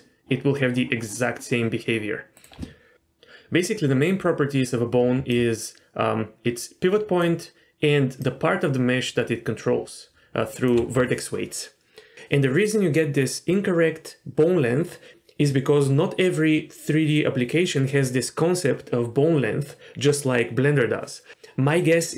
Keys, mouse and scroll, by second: 2.9 ctrl+z, 5.0 d, 5.3-7.2 drag, 7.2-8.1 d, 8.2-10.7 drag, 10.7 d.